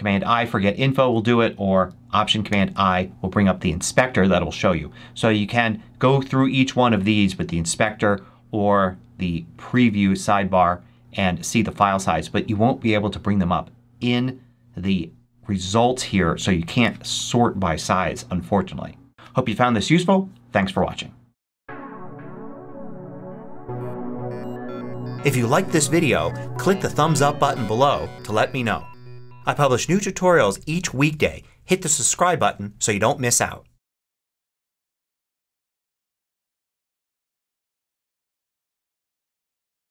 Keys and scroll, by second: 0.8 super+w, 2.3 alt+super+i.